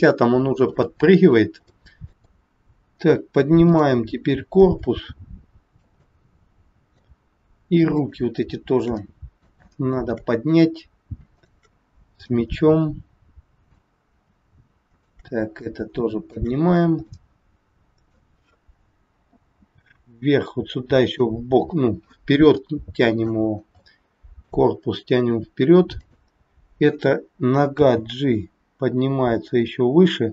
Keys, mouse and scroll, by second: 0.4-0.7 scroll up 3, 0.8 shift+middle click, 1.7 middle click, 2.1 middle click, 2.8 scroll down 1, 3.7 click, 4.6 shift+middle click, 6.1 middle click, 7.8 shift+click, 9.0 middle click, 9.8 shift+middle click, 10.4-11.0 scroll up 3, 11.3 shift+click, 12.3 middle click, 14.8 shift+click, 15.6 shift+middle click, 16.6 scroll down 2, 17.1 middle click, 17.1 scroll down 1, 19.6 g, 22.6 shift+middle click, 23.6 scroll down 1, 23.8 shift+middle click, 25.9 click, 27.7 g.